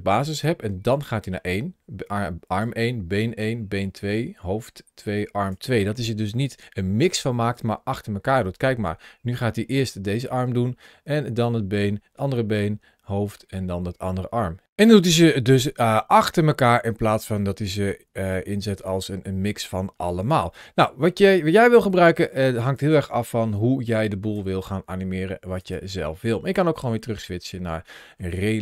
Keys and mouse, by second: 8.5-14.6 drag, 14.7-22.6 drag, 23.7 click, 25.4 click, 26.6-28.0 middle drag.